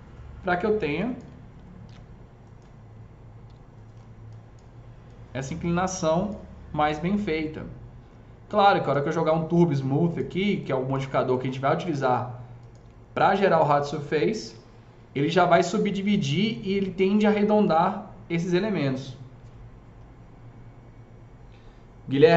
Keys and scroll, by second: 1.7 ctrl+shift+e, 3.3 1, 14.3 ctrl+shift+e.